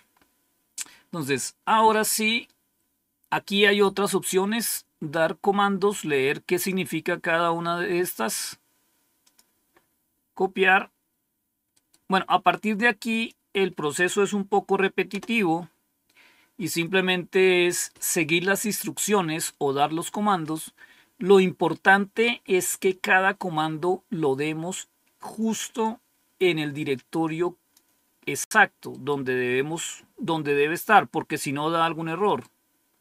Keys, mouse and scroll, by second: 0.6-1.3 scroll down 1, 1.3-5.0 scroll down 1, 5.0-7.4 drag, 8.2 right click, 9.2 click, 11.9 right click, 13.0 click, 15.0 Return, 25.8-27.7 drag, 28.8 right click, 29.7 click, 32.1 right click.